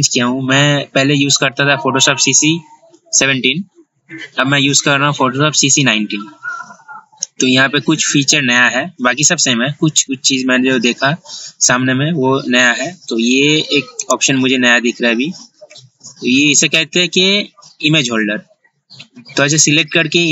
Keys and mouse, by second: 14.2-20.3 drag.